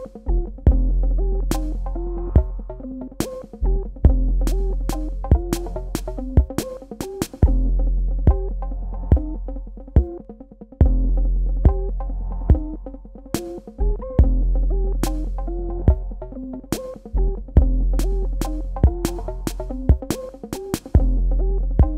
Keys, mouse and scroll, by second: 1.3 super+KP_Add, 3.4 super+KP_Subtract, 4.7 click, 10.1 click, 11.5 KP_Add, 15.2 super+KP_Subtract, 16.2 click, 17.4 space, 17.6 click, 18.0 space, 18.2 click, 18.6 Tab, 20.8 click.